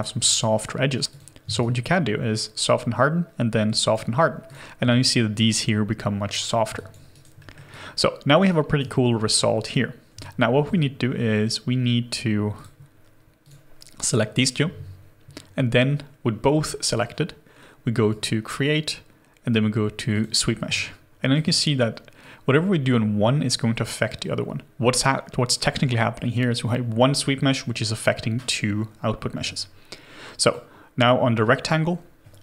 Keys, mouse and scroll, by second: 1.6 shift+right click, 4.9 alt+click, 6.4 scroll down 1, 6.8 alt+click, 7.1 alt+right click, 7.4 alt+middle click, 7.7 alt+click, 8.5 alt+right click, 10.2 alt+click, 20.8 alt+click.